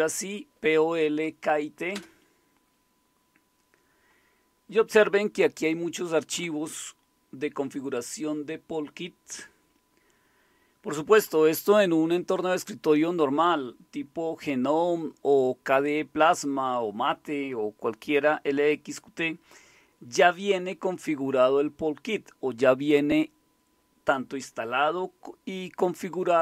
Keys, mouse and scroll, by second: 1.9 Return, 5.3-6.8 scroll up 2, 6.8-8.5 scroll up 1, 8.5-9.2 scroll up 1, 9.2-9.9 scroll up 1, 9.9-10.9 scroll up 1, 10.9-14.0 scroll up 1, 14.0-26.4 scroll up 1.